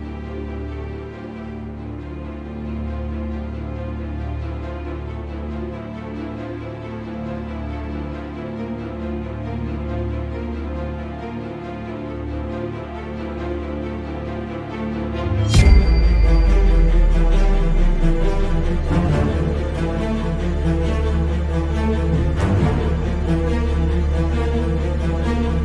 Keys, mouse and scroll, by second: 0.1 `, 0.5 scroll down 1, 0.7-4.6 shift+middle drag, 1.6-2.0 scroll down 1, 2.0-2.4 scroll up 1, 2.7 g, 4.1 Escape, 4.6-6.7 drag, 5.6 g, 6.8-7.2 scroll down 1, 7.2 shift+middle click, 7.6 click, 7.9-8.7 scroll up 3, 8.1-9.7 shift+middle drag, 8.7 g, 9.7 ctrl+click, 9.8 scroll down 1, 10.1 shift+middle click, 10.5 click, 11.1-12.8 shift+middle drag, 11.4-11.9 scroll up 2, 11.9 g, 12.8 ctrl+click, 12.9-13.3 scroll down 2, 13.3-13.9 shift+middle drag, 13.6 scroll up 2, 13.9 click, 14.2 g, 14.9 ctrl+click, 15.0-20.3 middle drag, 15.8-16.1 scroll up 2, 16.1 `, 16.8 scroll up 2, 17.4-18.4 scroll up 2, 18.4-19.0 scroll up 1, 19.0 scroll up 1, 20.3 right click, 20.4 a, 21.0 i, 22.8 click.